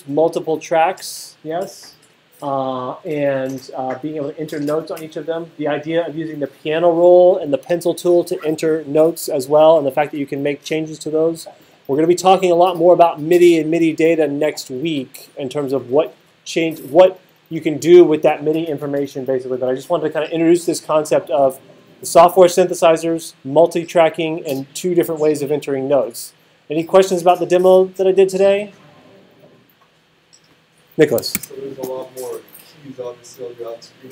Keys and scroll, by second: 31.3 super+s.